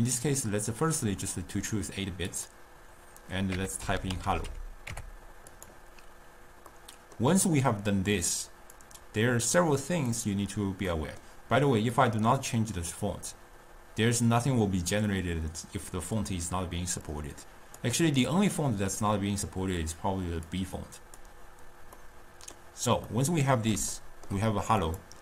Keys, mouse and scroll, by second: 2.4-4.4 drag, 4.4 l, 6.7-8.8 middle drag, 8.8-11.0 drag, 11.0-12.0 middle drag, 12.0-15.0 drag, 17.1-20.2 drag, 20.5 drag, 22.0-24.9 middle drag, 24.9 click.